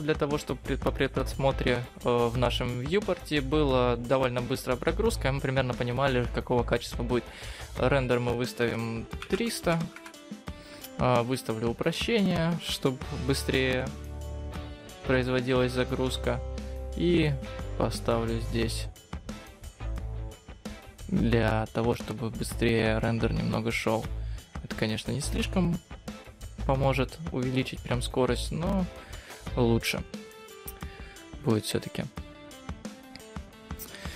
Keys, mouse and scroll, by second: 8.1 click, 11.9 click, 15.4 click, 17.3 click, 17.7 click, 23.4-25.5 scroll up 4, 25.5-25.9 scroll down 3, 25.9-26.6 scroll up 1, 28.3 click, 29.9 click.